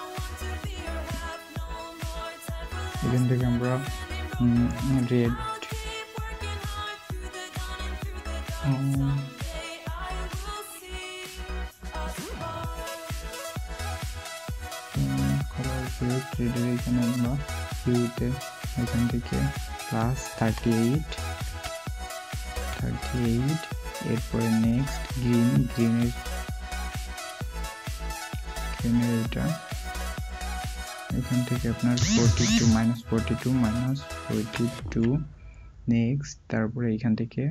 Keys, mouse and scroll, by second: 20.3 typing, 21.4 typing, 30.7 typing, 33.5-34.2 typing.